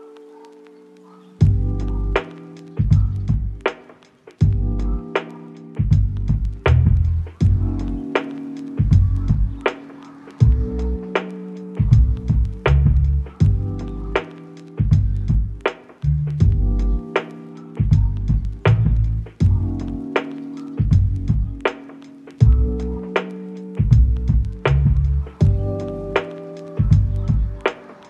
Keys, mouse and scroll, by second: 1.5 s, 1.6 x, 3.8 g, 4.6 ctrl+click, 4.9 shift+middle click, 7.4 g, 8.5 ctrl+click, 8.7 scroll up 1, 9.0 shift+middle click, 11.1 scroll down 1, 12.1 g, 12.9 ctrl+click, 14.0 ctrl+click, 14.2 shift+middle click, 15.2 shift+middle click, 15.7 shift+middle click, 17.2 g, 18.2 ctrl+click, 19.1 g, 19.5 ctrl+click, 20.2 g, 20.7 ctrl+click, 21.3 g, 21.7 ctrl+click, 22.1 g, 22.3 ctrl+click, 22.8 shift+middle click, 24.0 g, 24.2 ctrl+click, 25.0 g, 25.3 ctrl+click, 25.7 scroll down 1, 25.9 shift+middle click, 26.6-27.2 scroll up 1, 27.6 middle click.